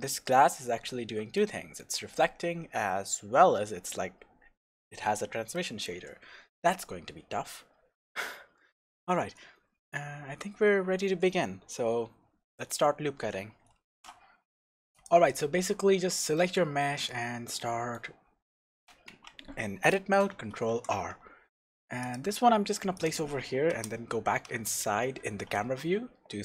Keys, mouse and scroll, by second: 1.4-14.0 shift+middle drag, 7.0-7.3 scroll down 1, 7.8-8.7 scroll up 1, 9.6 scroll down 1, 13.9 ctrl+alt+r, 14.0 click, 14.9 click, 15.8-16.3 scroll down 1, 16.3-23.1 middle drag, 16.6 scroll down 1, 19.1 Tab, 20.7 ctrl+r, 23.1 click, 23.7 KP_0, 24.6-25.2 scroll up 1, 25.2 scroll down 1.